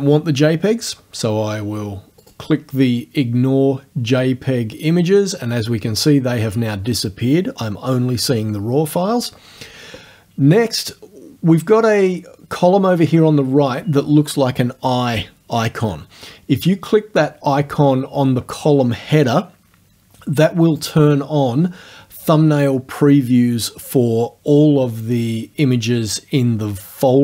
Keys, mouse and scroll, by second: 2.3 click, 20.8 click.